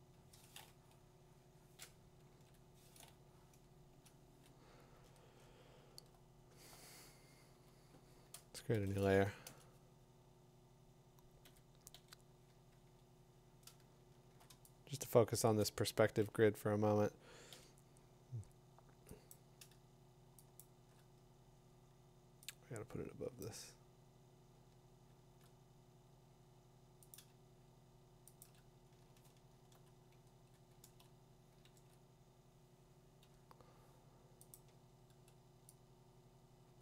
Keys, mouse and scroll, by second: 2.1 click, 2.3 ctrl+z, 3.9 Return, 4.8-5.5 scroll, 6.5 middle click, 6.6 middle click, 8.7 ctrl+shift+n, 12.8-14.4 typing, 12.9 Tab, 13.7-14.0 middle click, 13.9 middle click, 13.9 middle click, 15.6 click, 18.4 b, 18.4 d, 19.3 click, 20.6 click, 24.9 click, 24.9 middle click, 27.1 click, 29.1 click, 30.3 ctrl+z, 30.8 ctrl+z, 31.7 ctrl+z, 32.9 middle click, 34.1 p, 34.5 click.